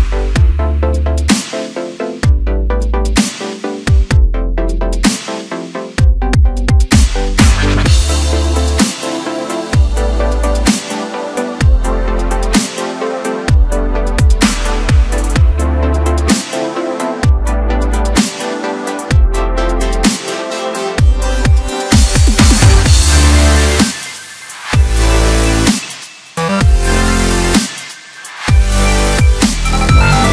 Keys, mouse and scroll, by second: 1.2-2.0 scroll down 1, 2.0 scroll down 1, 2.2 e, 2.9 s, 5.7 e, 6.1 s, 9.7-10.1 scroll down 3, 10.1 middle click, 10.8-12.2 scroll up 1, 12.2-15.3 drag, 20.9-21.9 scroll up 1, 21.9 KP_7, 22.9-25.1 right drag, 25.1-26.1 scroll up 1, 26.1-26.8 scroll down 1, 26.8 KP_1, 27.5-28.1 scroll up 1, 28.1 e, 30.0 e.